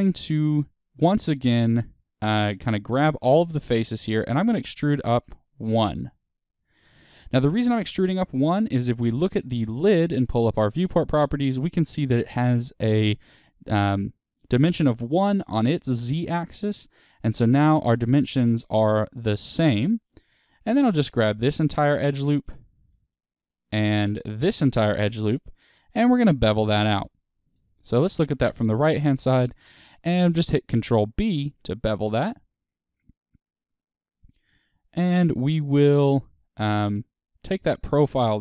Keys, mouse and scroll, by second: 2.9 a, 4.7 e, 8.1 Tab, 8.6 click, 9.0-10.2 middle drag, 10.2 n, 16.7-20.2 drag, 20.2 Tab, 21.2 alt+click, 22.0 2, 23.0-24.3 middle drag, 24.3 alt+shift+click, 25.4-25.8 scroll down 2, 25.8-27.6 middle drag, 27.6 KP_3, 28.3-28.7 scroll up 2, 28.7-30.6 shift+middle drag, 30.6 ctrl+b, 34.0-38.4 drag.